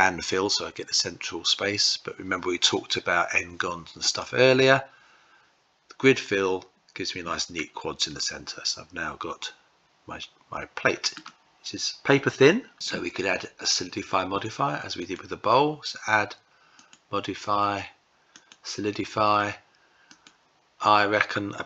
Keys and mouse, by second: 7.9-10.8 middle drag, 14.6 click, 16.4-18.2 drag, 19.8-21.6 drag.